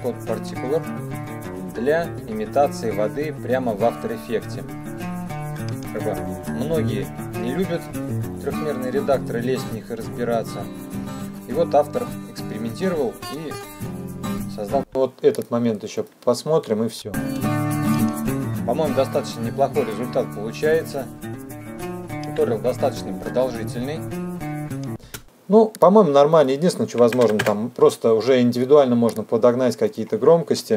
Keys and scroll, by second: 14.9 space, 17.9 space, 25.1 space, 27.3 KP_Subtract, 27.5 KP_4, 27.6 KP_Enter.